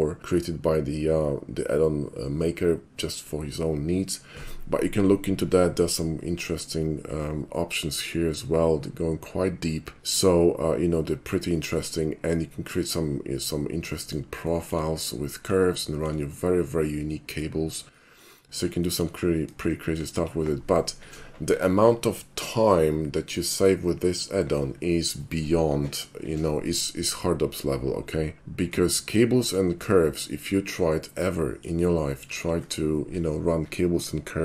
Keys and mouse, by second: 12.4 middle click, 12.8-14.2 middle drag, 14.5 shift+middle click, 15.0-15.5 shift+middle drag, 15.9 shift+middle drag, 16.3-17.4 shift+middle drag, 18.0 shift+middle drag, 18.8 shift+middle drag, 19.7 shift+middle drag, 28.7-29.6 middle drag, 30.0 shift+middle click, 30.5-31.7 shift+middle drag, 32.0 shift+middle click.